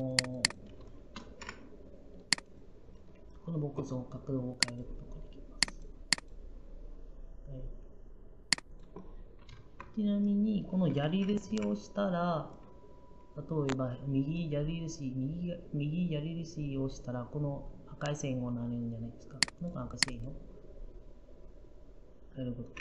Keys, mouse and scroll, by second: 2.3 g, 11.3 Right.